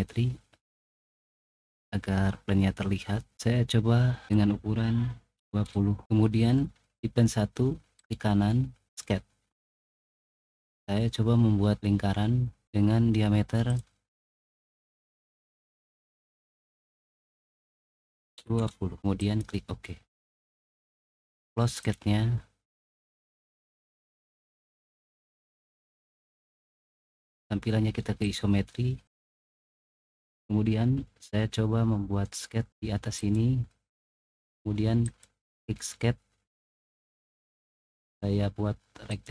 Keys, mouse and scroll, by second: 0.1-1.2 middle drag, 1.3 click, 2.9-4.1 middle drag, 4.2 click, 5.3 typing, 7.9 right click, 13.6 click, 14.6 click, 15.8 click, 18.3 typing, 21.6 click, 23.9-25.1 middle drag, 25.8 middle click, 26.3 click, 28.1 click, 33.1 click, 35.0 click, 39.0 click.